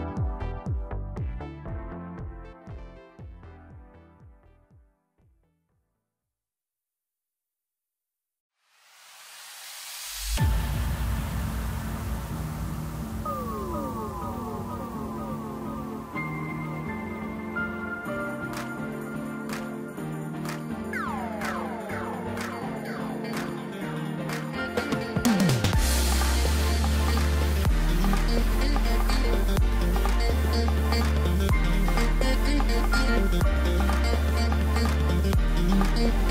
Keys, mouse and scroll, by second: 2.4-3.4 middle drag, 3.4 click, 4.3 e, 5.9-7.5 middle drag, 7.5 click, 7.9-9.5 middle drag, 9.5 e, 11.3-12.4 middle drag, 12.4 click, 13.4 l, 17.1 click, 18.2 KP_1, 19.9 shift+d, 23.1 scroll down 3, 24.7 click, 25.9-28.9 drag, 33.0-33.8 middle drag, 33.8-34.8 scroll up 1, 34.8 g.